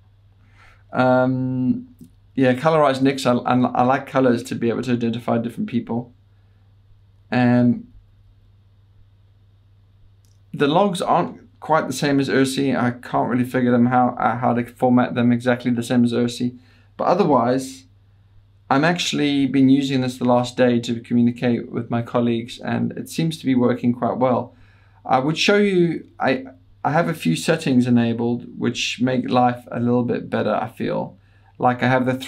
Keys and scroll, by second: 1.9 Down, 2.1 Page_Down, 2.3 Down.